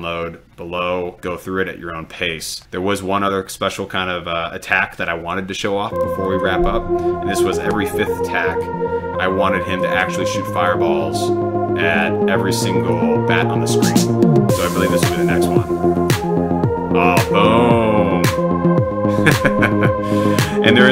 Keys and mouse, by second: 3.8 click, 6.3 click, 10.5 click, 11.9 click, 12.8 click, 16.0 click.